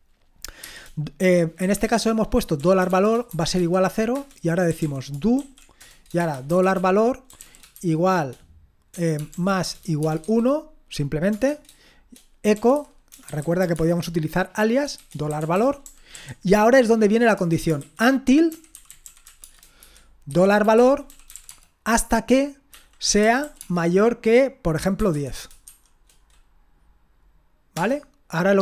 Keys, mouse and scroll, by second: 0.6-7.7 typing, 8.9-11.3 typing, 12.5-13.7 typing, 15.0-16.1 typing, 17.3-26.1 typing, 27.7 Return.